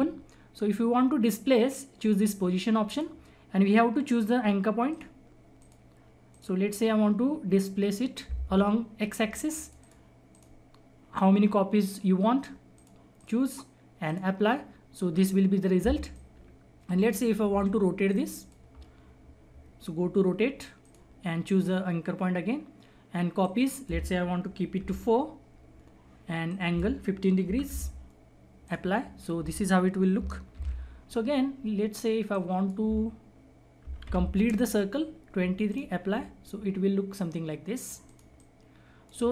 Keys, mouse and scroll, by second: 2.8 click, 2.8 click, 9.5 click, 12.7 click, 15.2-16.1 scroll up 1, 16.1 click, 17.4 Delete, 18.0 click, 20.8 click, 23.4 click, 26.4 click, 30.6 ctrl+z, 32.3-35.2 drag, 35.6 click, 36.9 scroll down 1, 38.0-39.3 drag.